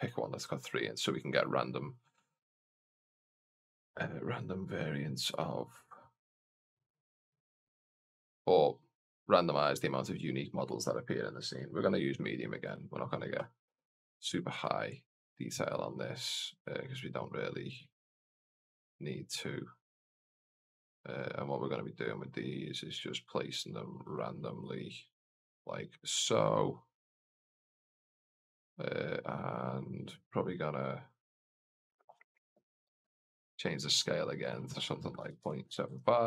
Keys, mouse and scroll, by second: 2.3 click, 2.7 click, 3.1-3.5 scroll down 1, 3.5 click, 3.7 click, 7.5 click, 7.8 click, 8.2 click, 11.1-12.4 scroll up 2, 12.5 click, 13.9 click, 14.4 click, 15.2 click, 15.5 click, 16.4 click, 17.6 click, 17.9 click, 18.6 click, 19.6 click, 20.1 click, 20.4 click, 21.0 click, 21.2 click, 21.6 click, 22.5 click, 22.7 click, 23.0 click, 23.4 click, 23.9 click, 24.3 click, 25.1 click, 26.7 click, 27.1 click, 27.5 click, 33.8 click, 34.3-36.2 drag.